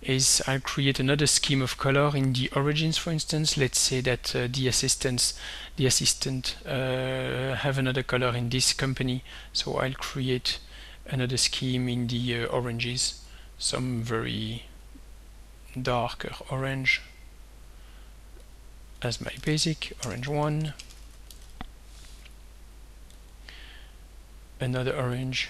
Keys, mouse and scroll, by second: 10.4 click, 12.0 click, 13.3-15.0 drag, 15.7 click, 16.4 click, 17.2 click, 18.5 click, 19.1-22.1 typing, 23.2 click, 25.3 click.